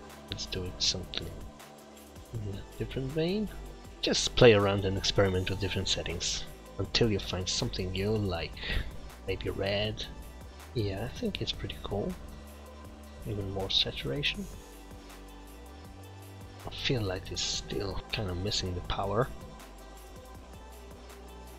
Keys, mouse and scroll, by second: 6.8 click, 16.6 click, 17.5 click.